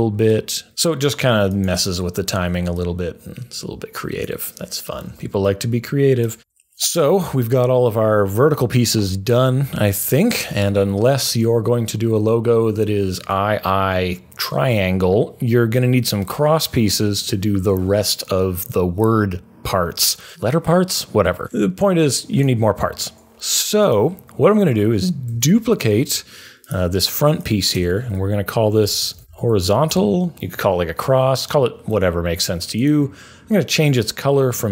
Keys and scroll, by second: 5.0 super+a, 6.3 Delete, 25.3 super+d, 28.6-30.0 typing.